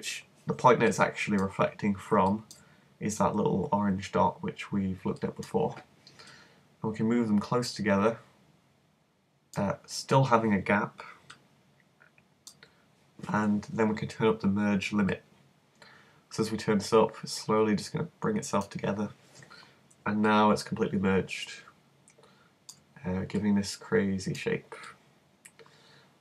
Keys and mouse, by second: 0.3 middle click, 1.6 middle click, 3.9 middle click, 4.5 middle click, 6.3-8.1 drag, 10.0-15.0 middle drag, 15.1-16.9 drag, 20.2-22.2 middle drag, 22.3 middle click, 23.0-26.2 middle drag.